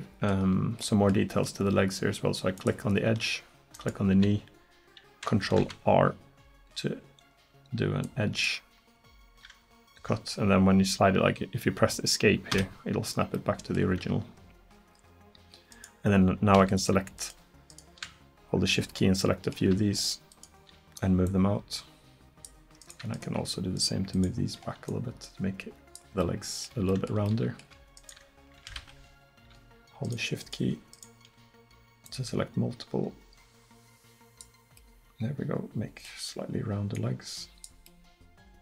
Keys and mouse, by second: 2.6-3.8 drag, 5.6 ctrl+r, 15.8-19.0 right drag, 19.2-20.3 middle drag, 22.5 right click, 26.0 right click, 26.3-27.5 drag, 34.8-38.5 drag, 38.5 middle click.